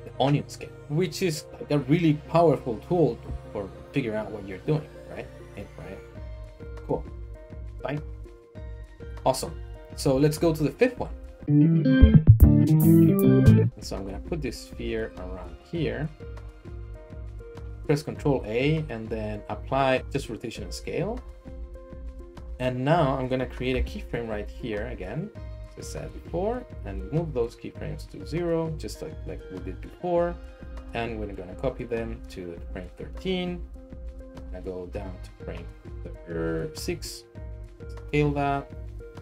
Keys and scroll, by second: 5.6 s, 6.3 r, 9.3 Tab, 10.0 Tab, 14.1 s, 15.4 g, 15.6 z, 17.7 n, 18.1 ctrl+a, 22.1 Tab, 23.7 i, 26.8 g, 26.9 x, 30.5 shift+d, 30.7 x, 34.8 g, 35.0 z, 36.8 typing, 38.0-38.7 typing.